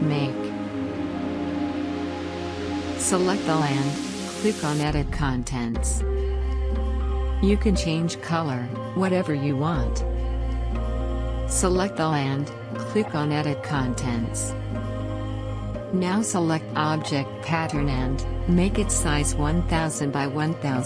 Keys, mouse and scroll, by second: 0.2-14.8 drag, 14.8-15.9 typing, 16.7 Return, 18.5 click.